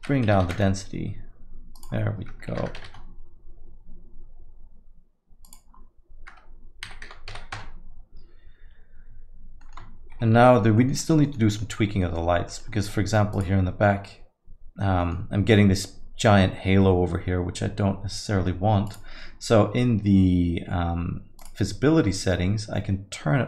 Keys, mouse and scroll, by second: 1.8 click, 5.4 click, 9.6 middle click, 10.1 shift+F5, 10.5 middle click, 10.8 alt+middle click, 11.0 middle click, 11.3 alt+middle click, 11.5 alt+middle click, 11.8 scroll up 1, 12.0 middle click, 12.5 alt+middle click, 12.7 middle click, 13.3 click, 15.0 middle click, 18.9 click, 21.4 click.